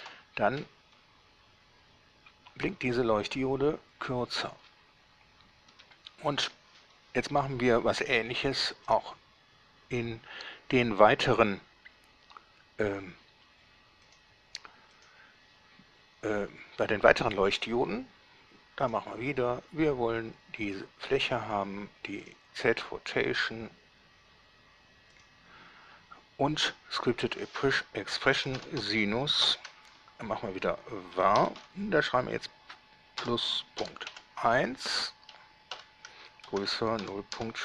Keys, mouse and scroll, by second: 0.3 alt+a, 5.9 Escape, 9.1 right click, 14.3 click, 15.1 click, 19.1 click, 20.9 click, 22.5 click, 25.4 click, 27.3 click, 28.7 s, 28.7 i, 29.0 n, 29.7 shift+8, 31.4 v, 31.6 a, 31.7 r, 34.0 ., 34.3 1, 35.9-37.6 typing.